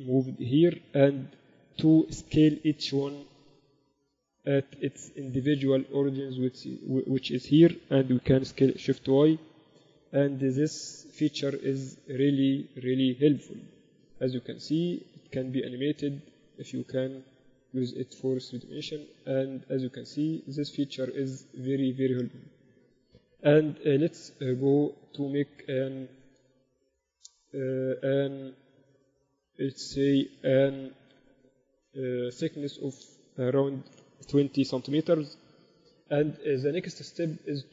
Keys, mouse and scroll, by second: 0.5 g, 4.9-6.8 drag, 8.3 s, 22.3-24.0 drag, 25.4-27.3 drag, 29.8-31.6 drag, 36.3 Tab.